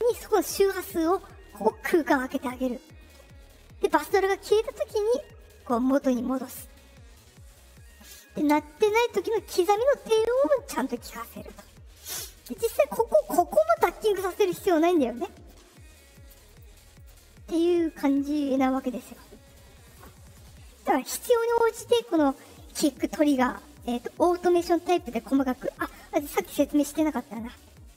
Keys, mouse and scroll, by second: 2.9-4.9 drag, 5.3-8.2 drag, 12.8-15.4 drag, 15.9 right click, 16.4 click, 16.9 click, 18.7 click, 22.1 click, 23.7 click, 24.1 click.